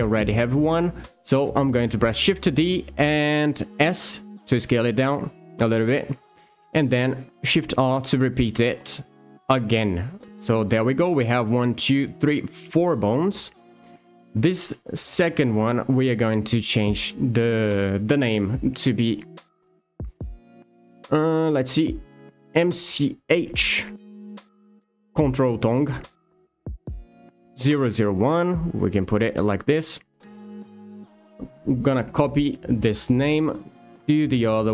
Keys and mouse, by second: 0.8 shift+middle click, 2.2 shift+d, 3.8 s, 6.2 click, 8.2 shift+r, 9.2 shift+r, 14.0 alt+click, 16.9 F2, 27.6 BackSpace, 27.8 BackSpace, 29.4 0, 31.5 ctrl+c.